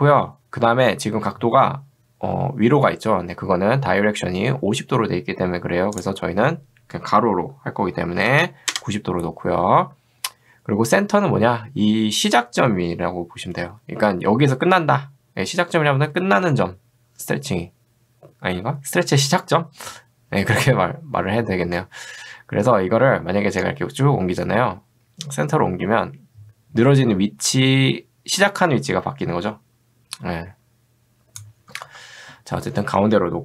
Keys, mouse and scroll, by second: 6.0 click, 8.3 9, 23.8-31.7 drag, 31.9 ctrl+z.